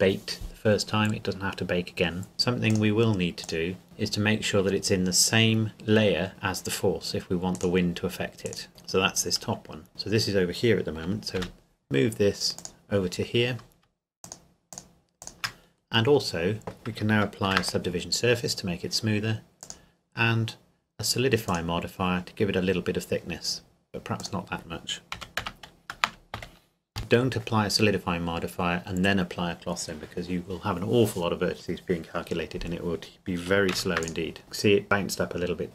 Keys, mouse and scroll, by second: 2.3 click, 3.8 scroll down 1, 7.5 right click, 8.7-9.6 scroll up 1, 9.9 click, 12.6 click, 14.2-15.6 shift+drag, 15.6-17.0 scroll up 2, 17.5 ctrl+2, 19.6-22.4 drag, 22.4-23.6 scroll up 2, 23.6-24.2 scroll up 1, 24.2 click, 25.1 KP_Decimal, 25.4 KP_0, 26.4 KP_5, 33.5 ctrl+Num_Lock, 33.7 ctrl+s, 34.0 click, 35.6 click.